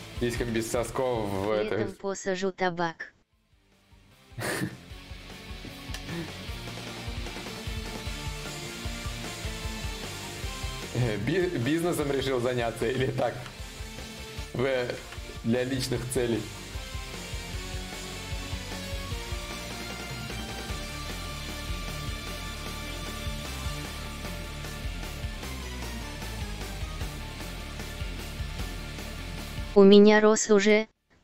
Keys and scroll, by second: 30.6 x.